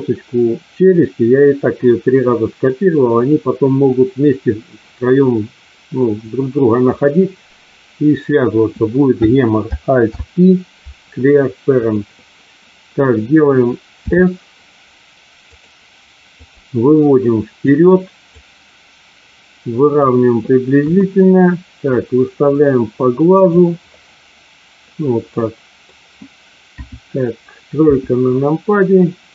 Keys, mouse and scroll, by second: 9.9 alt+p, 13.9 s, 15.4 click, 16.4-17.7 drag, 18.3-19.9 drag, 20.7 KP_1, 21.8-23.6 drag, 25.3 middle click, 26.7 KP_2, 27.8 KP_3.